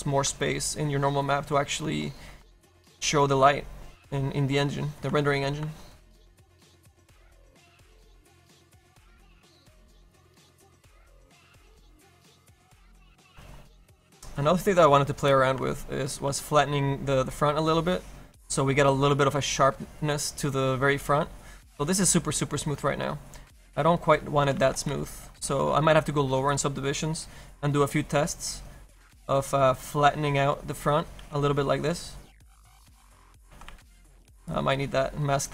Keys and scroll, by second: 16.5 s, 21.1 s, 24.8 ctrl+z, 25.1 s, 34.0 z, 34.3 s.